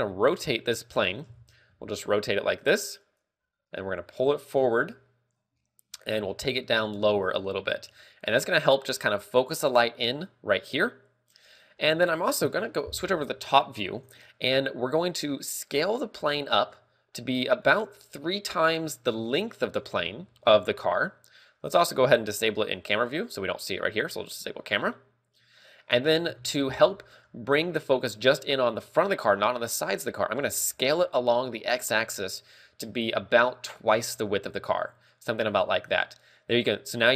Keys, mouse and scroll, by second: 0.2 r, 1.6 right click, 1.8 ,, 2.3 r, 3.6 click, 3.8 g, 5.1 click, 6.7 g, 7.7 click, 7.7 r, 12.7 KP_7, 15.6 click, 16.5 s, 18.1 click, 18.2 scroll down 3, 19.0 g, 25.1 click, 26.8 KP_7, 30.9 s.